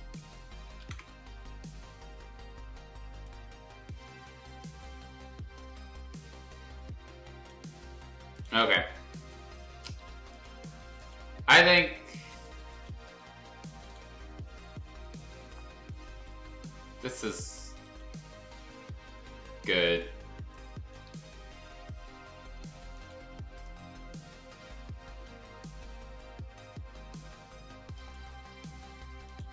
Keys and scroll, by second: 0.8 ctrl+u, 20.3 space.